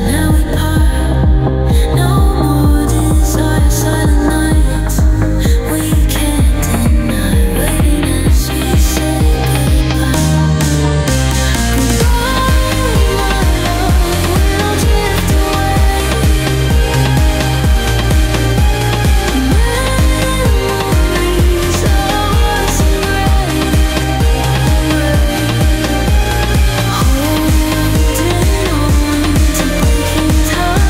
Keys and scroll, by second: 7.7 ctrl+shift+[, 11.7 i, 12.5 space, 15.0 ctrl+z, 18.8 i, 24.7 ctrl+g.